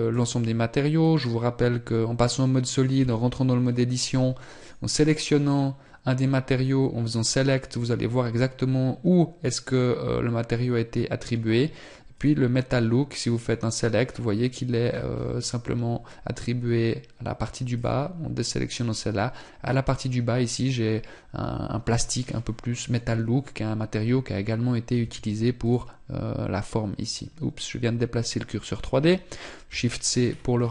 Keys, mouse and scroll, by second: 12.0 click, 14.9 scroll up 1, 15.7-16.5 scroll down 1, 17.6 click, 25.5 click, 28.0 scroll down 1, 29.5 shift+c.